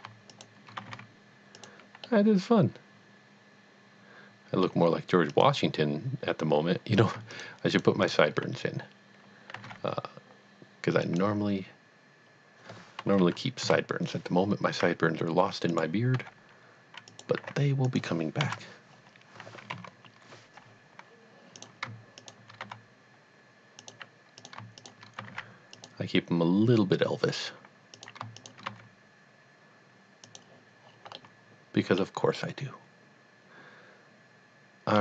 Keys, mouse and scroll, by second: 0.3 shift+click, 0.8 g, 1.0 z, 1.6 click, 2.1 middle click, 2.4 middle click, 5.3 click, 7.3 shift+click, 7.8 shift+double click, 8.0 shift+click, 9.5 g, 9.6 z, 11.0 click, 13.2 KP_3, 13.6 KP_1, 14.7 e, 15.7 click, 16.1 g, 17.0 click, 17.4 r, 17.9 click, 18.4 KP_1, 19.7 ctrl+KP_3, 21.6 click, 22.2 shift+click, 22.7 g, 23.9 click, 24.4 click, 24.8 shift+click, 25.2 g, 25.4 z, 25.9 click, 27.9 click, 28.5 shift+click, 28.6 click, 28.7 g, 30.3 click, 30.9-31.3 scroll down 1, 31.3 middle click, 31.5 middle click, 32.4 middle click, 32.5 middle click, 34.1 middle click.